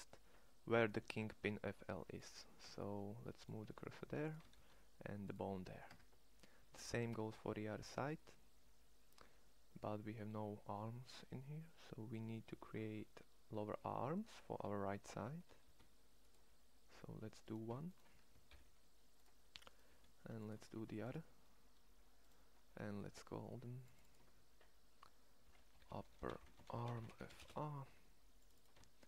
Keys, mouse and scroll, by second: 1.1 shift+s, 2.4 Tab, 3.5 Tab, 4.3 shift+s, 5.7 Tab, 13.6 Tab, 14.9 e, 18.2 alt+p, 19.6 g, 20.5 shift+d, 25.6 p.